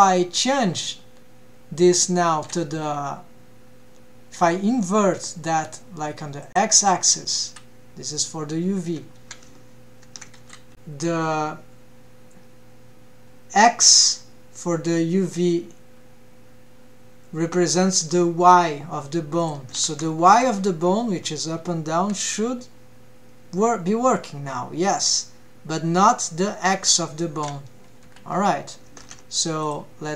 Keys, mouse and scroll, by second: 10.0 ctrl+Tab, 10.7 click, 19.4 click, 19.9 ctrl+Tab, 20.2-20.5 drag, 22.0 g, 29.1 ctrl+Tab, 29.6 click.